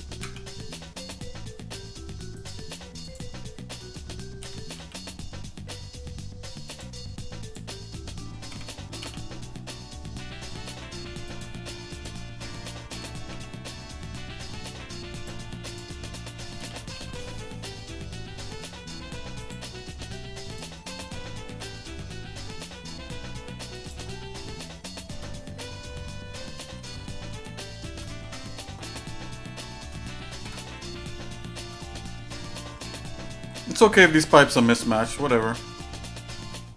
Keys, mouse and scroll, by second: 3.3 click, 3.3 shift+middle click, 4.4 g, 7.5 click, 8.5 g, 12.2 click, 12.9 g, 15.7 click, 16.6 g, 20.6 click, 21.5 g, 24.1-25.2 shift+middle drag, 25.3 scroll down 1, 25.7 middle click, 26.1 shift+middle click, 27.1 middle click, 27.6 shift+middle click, 28.2 Tab, 28.8 middle click, 29.4 shift+middle click, 30.4 KP_Divide, 31.3 shift+middle click, 31.9 middle click, 32.5 shift+middle click, 33.1 middle click, 33.5 scroll up 2, 34.7-35.1 scroll down 1, 35.3-36.7 shift+middle drag.